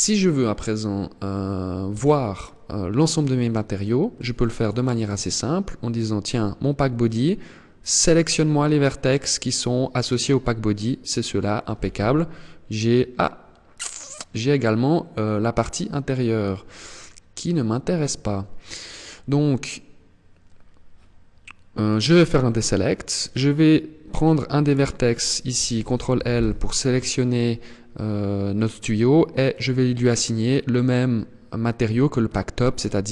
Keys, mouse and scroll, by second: 1.3 a, 3.6 click, 4.0 click, 4.4 click, 5.3 click, 7.5 click, 11.4 z, 15.6-16.1 scroll up 3, 16.1-17.4 scroll down 2, 21.3 click, 24.1 right click, 25.6 ctrl+l, 28.9 click.